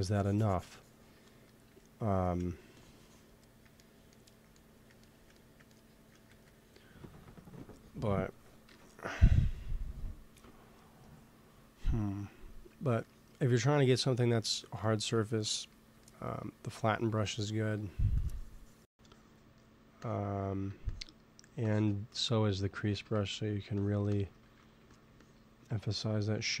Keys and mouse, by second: 2.7-4.4 drag, 4.5 click, 4.9-6.2 middle drag, 6.2 ctrl+s, 7.4-9.2 drag, 8.6 KP_1, 12.9-15.9 middle drag, 16.6 f, 17.0 t, 17.6 t, 18.1-23.2 drag, 22.8 shift+c, 23.0 f, 23.7-24.8 drag, 24.4 ctrl+z, 24.7 f.